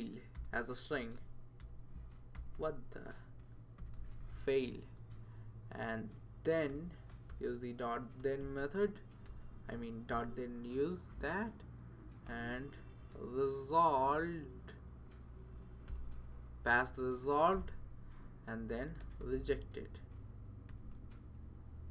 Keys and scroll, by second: 0.0-4.5 typing, 5.0 Right, 5.3 Right, 5.8 Right, 6.4-10.6 typing, 12.3-13.2 typing, 15.4 Down, 15.9 Return, 17.5 typing, 18.8-21.2 typing.